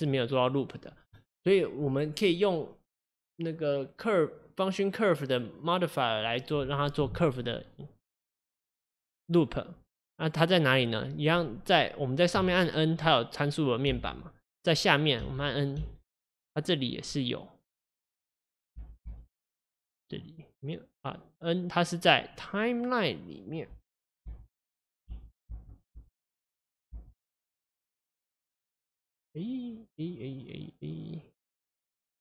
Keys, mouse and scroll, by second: 0.5-9.2 drag, 12.5 n, 14.0 n, 17.9 click, 23.6-26.0 drag, 26.0 n, 26.9 n.